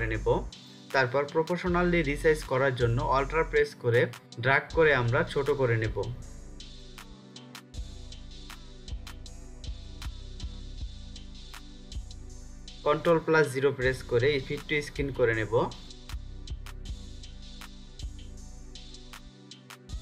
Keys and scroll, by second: 0.8 ctrl+0, 12.7 ctrl+0.